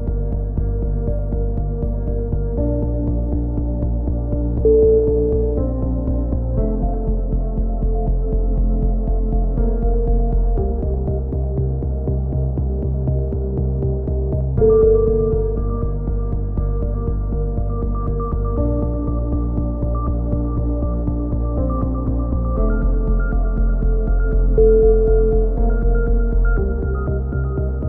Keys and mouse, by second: 0.1-0.6 drag, 1.8-2.1 drag, 2.5 z, 3.0-3.5 drag, 7.1 z, 10.1 a, 10.4 Tab, 10.7-11.2 drag, 12.3 KP_3, 12.5-13.3 middle drag, 17.1 KP_3, 17.4 middle drag, 18.0-18.6 drag, 18.6 Tab, 19.5 right click, 19.6 ctrl+l, 20.1 ctrl+n, 23.4 a, 23.6 Tab, 25.4 KP_3, 25.9 Tab, 26.1 z, 26.7 z.